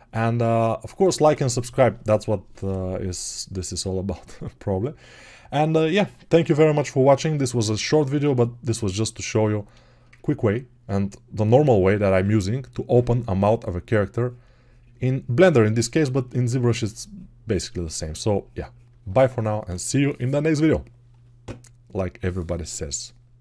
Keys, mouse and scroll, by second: 14.3 shift+2, 16.0 alt+right click, 16.5-17.6 drag, 17.6-18.8 shift+right drag, 18.8-23.4 drag.